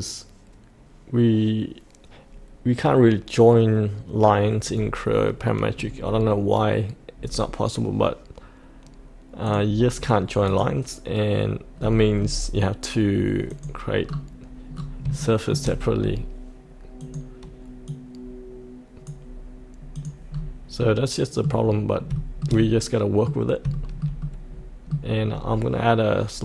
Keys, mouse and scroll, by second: 9.4 click, 10.0-10.5 scroll down 1, 10.5 click, 11.7-13.5 scroll down 1, 13.5 click, 14.0-14.7 scroll down 1, 14.7-15.1 scroll up 1, 15.2 shift+middle click, 16.0-17.0 scroll down 1, 17.0-19.9 drag, 20.3-20.8 scroll up 1, 20.8-22.0 middle drag, 22.6 middle click, 23.0 middle click, 23.7 shift+middle click, 25.3 scroll down 1.